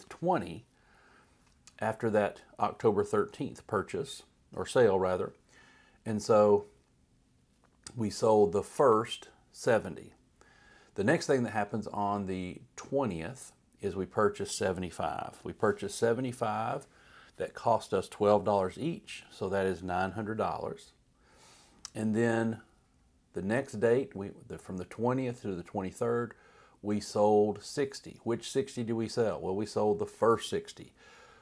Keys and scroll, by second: 14.9-15.8 typing, 16.0 Right, 18.4 typing, 19.0 Right.